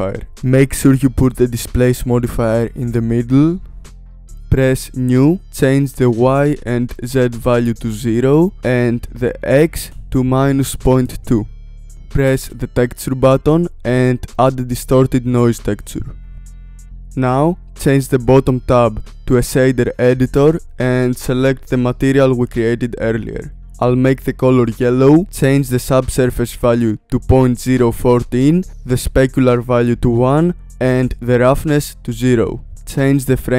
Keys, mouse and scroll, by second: 0.3 click, 2.2-4.7 drag, 5.1-7.5 drag, 7.9-9.3 drag, 11.8 click, 16.5 click, 23.2-23.7 drag, 25.6-28.6 drag, 29.0-32.7 drag.